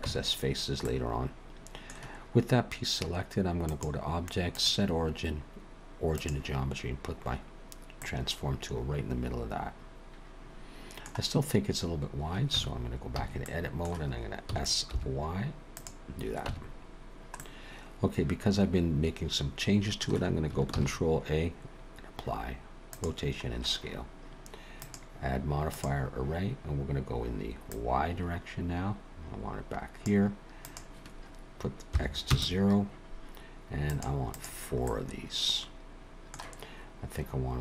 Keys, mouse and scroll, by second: 0.0 Tab, 0.8 middle click, 2.6-3.0 scroll up 1, 3.7 click, 8.0 middle click, 12.5 Tab, 13.2 a, 13.4 middle click, 14.4 s, 17.4 Tab, 17.4 middle click, 20.7 ctrl+a, 24.7 click, 27.6 click, 30.6 click, 33.9 click, 34.3 click, 34.8 middle click.